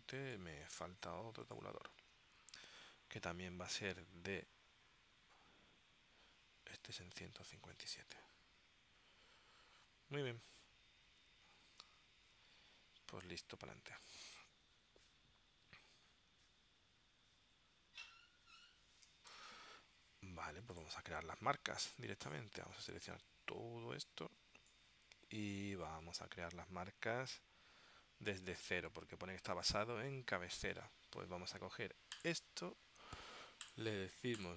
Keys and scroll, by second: 19.4 ctrl+alt+super+p.